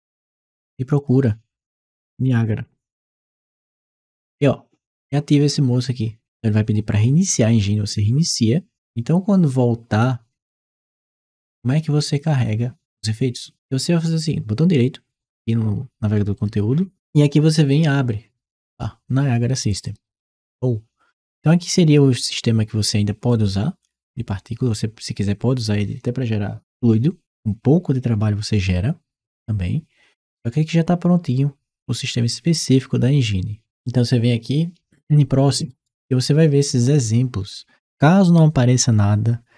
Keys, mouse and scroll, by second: 0.8 click, 10.9 click, 16.2 right click, 19.7 click, 34.9 click.